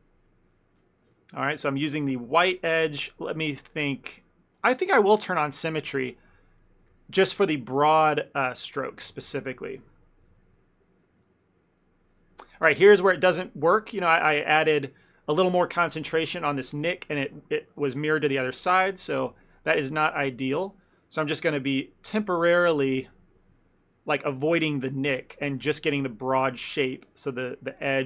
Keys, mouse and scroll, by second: 0.3 click, 0.9 click, 1.3 click, 2.0 click, 5.2 click, 5.4 ctrl+z, 5.6 ctrl+z, 6.3 ctrl+z, 6.7 ctrl+middle click, 7.5 click, 7.9 click, 9.1 click, 9.2 shift+middle click, 9.4 ctrl+middle click, 10.0 click, 10.3 click, 11.2 click, 11.3 shift+middle click, 12.2 click, 12.7 ctrl+middle click, 13.0 shift+middle click, 17.5 ctrl+z, 17.8 ctrl+z, 18.8 ctrl+z, 18.8 ctrl+middle click, 19.2 f, 19.7 click, 20.2 click, 20.8 click, 20.9 shift+middle click, 21.8 click, 22.8 shift+middle click, 23.0 ctrl+middle click, 23.5 shift+middle click, 23.8 shift+middle click, 24.5 click, 24.7 click, 25.1 shift+middle click, 25.7 click, 25.9 click, 26.8 click, 27.4 click, 27.5 shift+middle click.